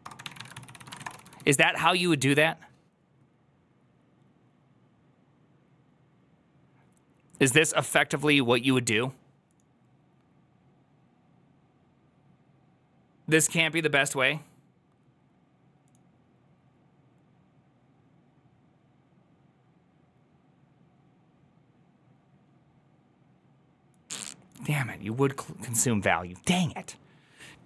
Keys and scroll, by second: 0.0-1.6 typing, 3.3-4.0 typing, 7.2 2.